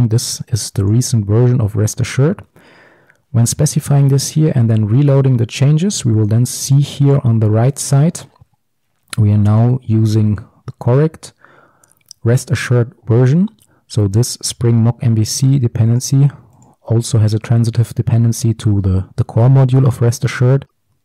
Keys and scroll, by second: 1.0 ctrl+shift+super+o.